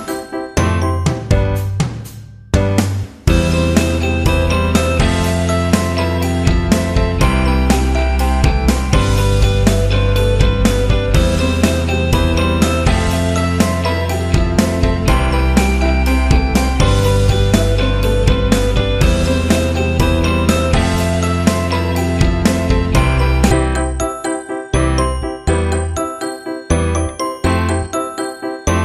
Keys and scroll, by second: 19.8 Return, 21.3 ctrl+j, 24.4 Delete, 25.8 ctrl+t.